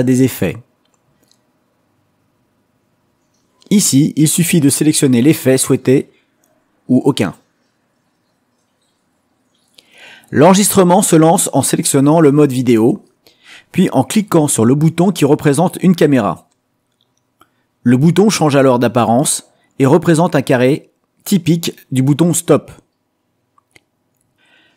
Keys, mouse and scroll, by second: 2.7 click, 5.3 click, 6.5 click, 14.2 click.